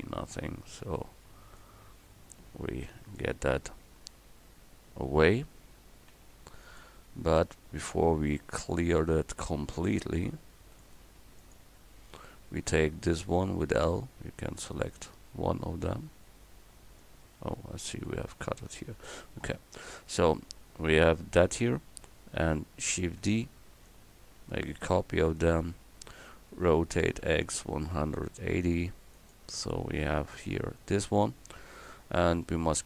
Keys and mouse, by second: 0.6 c, 6.1 x, 9.4 c, 11.0 x, 13.8 l, 17.6 ctrl+z, 18.1 ctrl+z, 18.4 ctrl+z, 23.0 shift+d, 23.9-26.2 drag, 26.7 r.